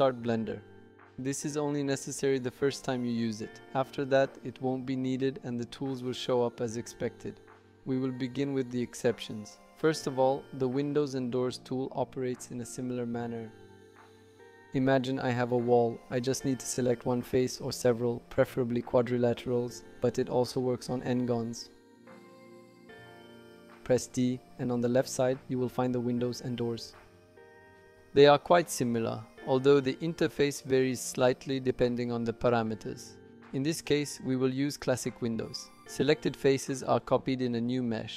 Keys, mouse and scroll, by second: 7.8 click, 8.0 right click, 9.8 click, 10.9 click, 14.9 click, 15.7 click, 17.4 shift+click, 18.3 shift+click.